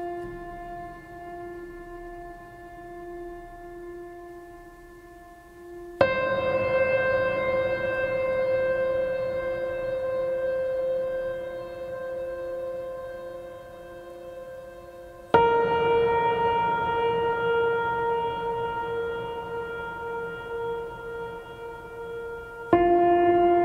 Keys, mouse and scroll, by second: 9.6 right click, 10.7 right click, 11.9 right click, 12.9 right click, 13.4 right click, 13.9 right click, 14.1 right click, 18.5 right click.